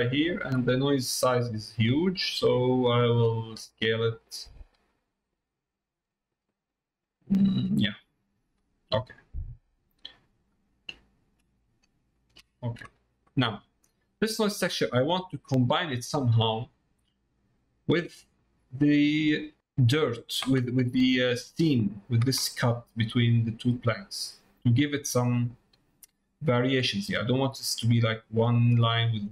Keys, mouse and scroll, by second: 0.7 middle click, 4.2-7.6 drag, 7.9 middle click, 9.0 middle click, 10.1 middle click, 11.2 middle click, 12.2 ctrl+shift+click, 13.4 middle click, 14.7 middle click, 17.0 middle click, 17.5 middle click, 18.5 middle click, 19.1 middle click.